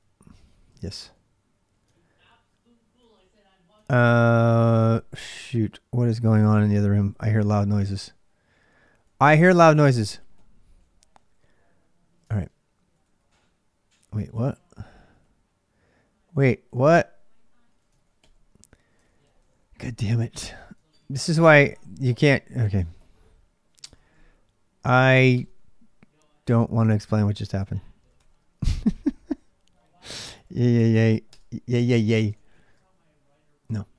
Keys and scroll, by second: 0.1 y, 0.5 Return, 1.7 ctrl+a, 1.9-4.1 ctrl+a, 4.1 ctrl+[, 4.2-11.2 typing, 12.1 ctrl+[, 12.1 ctrl+j, 12.8 j, 14.1-20.1 typing, 17.7 ctrl+[, 18.8 ctrl+[, 21.3 ctrl+a, 21.5 ctrl+a, 22.6 ctrl+[, 22.8 k, 23.6 Return, 24.8 1, 25.1 Return, 26.9-28.4 typing, 29.9-30.8 typing, 31.1 Return, 32.1 shift+z, 32.3 shift+z, 33.5-33.9 typing, 33.8 Return.